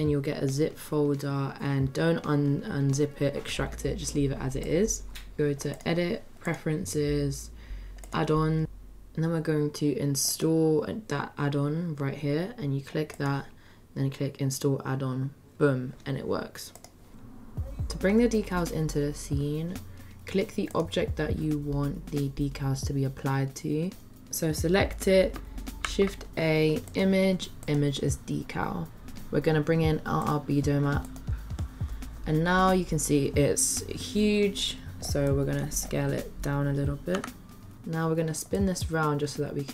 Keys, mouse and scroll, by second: 5.8-6.7 drag, 20.7 click, 25.8 shift+a, 35.3-35.7 middle drag, 37.1 s, 38.5-39.7 drag.